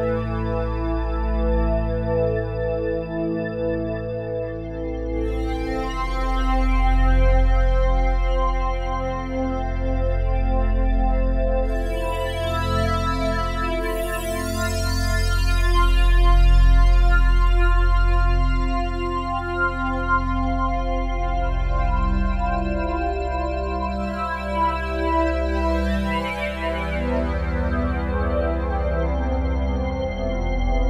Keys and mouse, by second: 0.0-2.6 drag, 3.5-8.9 drag, 9.3 click, 9.7 click, 10.0 click, 10.8 click, 11.3 click, 12.3 click, 13.0 click, 14.6 click, 16.7 click, 17.4 click, 18.1 click, 18.9-20.5 drag, 21.5-23.1 drag, 24.5 click, 25.0 click, 25.3 click, 28.8-30.8 alt+drag.